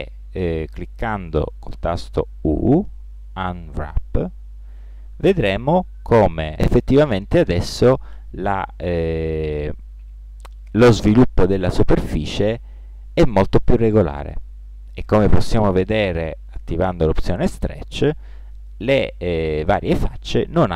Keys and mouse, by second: 2.2 u, 5.9-8.1 middle drag, 11.3 click, 12.1-13.3 drag, 20.3-20.7 drag.